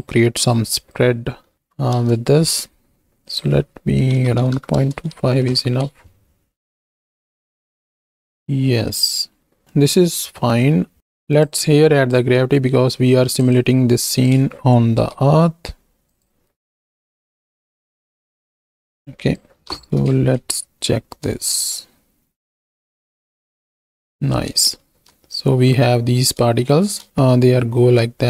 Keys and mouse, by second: 0.5-2.0 drag, 3.2-4.8 drag, 5.3 shift+Right, 5.5 shift+Left, 5.8 space, 8.7 space, 9.6 middle click, 10.4 middle click, 11.3-12.2 drag, 13.1 middle click, 14.2 click, 15.0 shift+d, 16.1 click, 17.1 alt+p, 18.3 click, 18.9 click, 19.6 shift+Right, 19.7 shift+Left, 20.1 space, 21.4 shift+drag, 24.3 space, 26.6 shift+middle click.